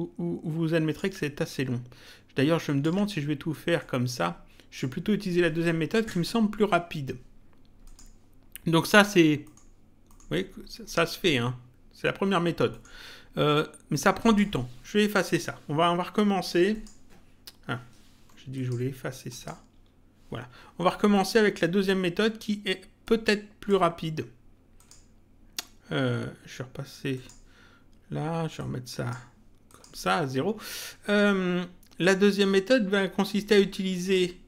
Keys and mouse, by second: 3.8 click, 7.8 click, 9.4 middle click, 12.6 middle click, 14.2 click, 15.4 Delete, 16.7 click, 18.5 click, 19.7 Delete, 21.1 middle click, 23.0 click, 24.7 click, 27.1 click, 28.5 click, 31.0 middle click, 33.4 click.